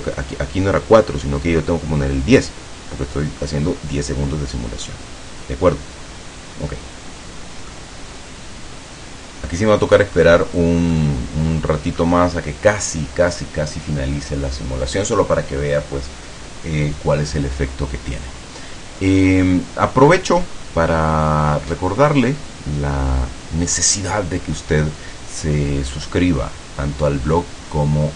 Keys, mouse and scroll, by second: 7.8-9.8 middle drag, 10.2-10.6 scroll up 2, 10.6 scroll down 2, 11.1-12.3 middle drag.